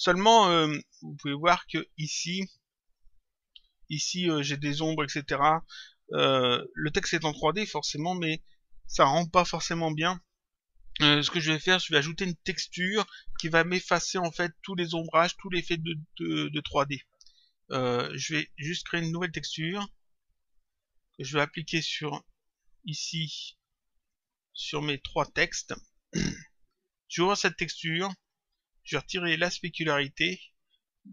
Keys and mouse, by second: 1.3 click, 2.8 click, 18.3 click, 20.7 click, 22.8 click, 24.9 click, 27.1 click, 30.0 click.